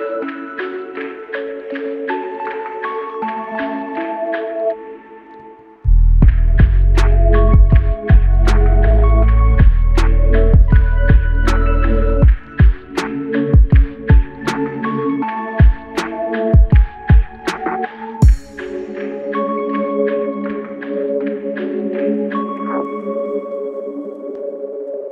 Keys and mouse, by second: 2.4 ctrl+click, 8.0 ctrl+click, 13.7 alt+click, 16.1 alt+click, 22.1 ctrl+click.